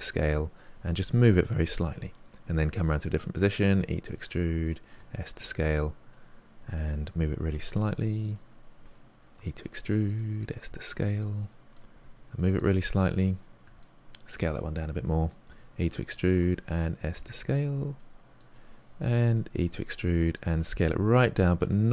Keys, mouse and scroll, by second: 0.9 g, 2.0-3.7 middle drag, 3.7 e, 4.9 s, 6.0-7.5 middle drag, 7.5 g, 8.3-9.3 middle drag, 9.3 e, 10.3 s, 11.4 middle click, 11.9 g, 13.6 s, 14.1-15.4 middle drag, 15.4 e, 16.3 s, 17.9 middle click, 18.5 g, 18.7 middle click, 19.6 e, 20.5 s.